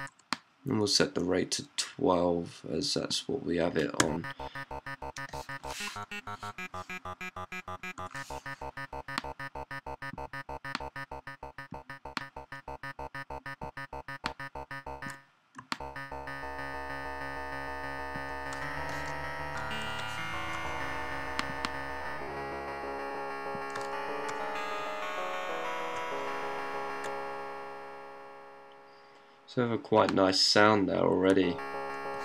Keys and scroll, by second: 3.8-7.8 typing, 8.9 typing, 10.5-11.3 typing, 15.2 typing, 18.4-26.9 typing, 28.4-29.2 typing, 31.2-32.2 typing.